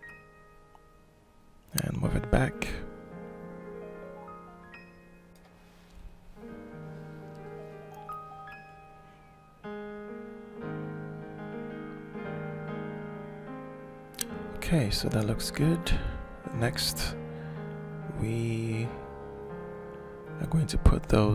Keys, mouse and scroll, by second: 1.3 click, 2.8 middle click, 3.9 ctrl+z, 4.7-6.2 drag, 6.6-9.2 alt+shift+drag, 9.9 ctrl+shift+click, 10.2 ctrl+shift+click, 12.2 click, 13.1 alt+shift+middle click, 14.7 click, 15.8 F9, 17.2 click, 17.7 click, 19.1 scroll up 2, 19.6-21.3 alt+shift+drag.